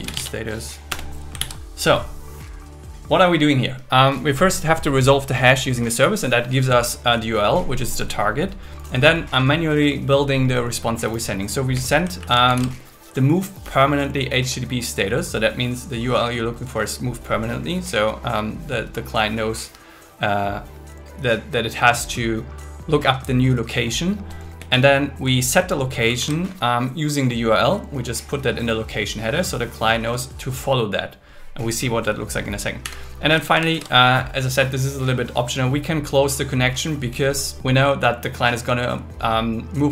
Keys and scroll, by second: 0.0 shift+s, 0.9 Return, 1.4 super+s, 11.7 Down, 12.2 super+Right, 12.5 shift+super+Left, 24.6 Down, 25.6 super+Left, 26.1 shift+super+Right, 32.8 Down, 33.5 super+Right, 33.7 shift+super+Left.